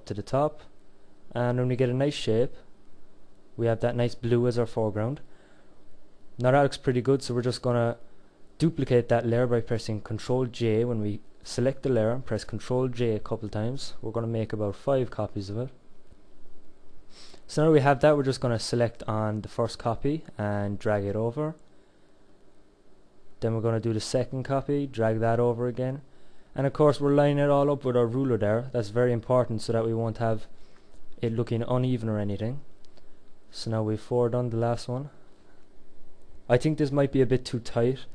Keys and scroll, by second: 8.8 ctrl+j.